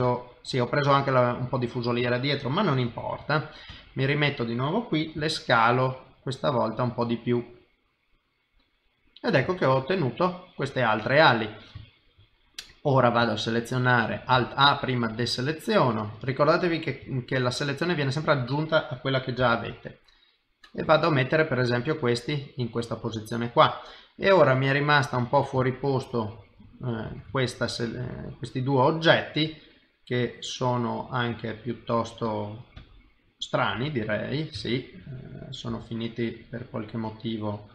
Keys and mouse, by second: 1.3 middle click, 2.9 KP_3, 3.7 KP_1, 5.2 s, 7.0 middle click, 8.7 middle click, 9.5 shift+middle click, 9.9 middle click, 11.1 middle click, 11.8 shift+middle click, 12.6 middle click, 13.3 ctrl+right click, 14.3 alt+a, 14.7 ctrl+right click, 16.3 middle click, 17.1 shift+middle click, 17.5 middle click, 19.4 g, 20.8 middle click, 23.1 middle click, 25.6 ctrl+right click, 27.1 alt+a, 27.4 ctrl+right click, 28.2 middle click, 32.8 KP_1, 33.7 KP_7, 34.6 shift+middle click, 35.7 g.